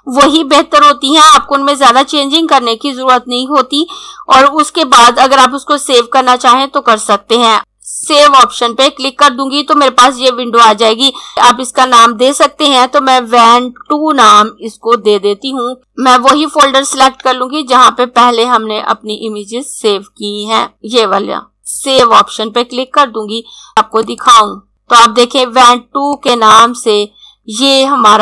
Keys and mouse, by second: 8.0 click, 11.3 click, 12.9-14.8 typing, 16.6 click, 24.0 click, 26.2 click.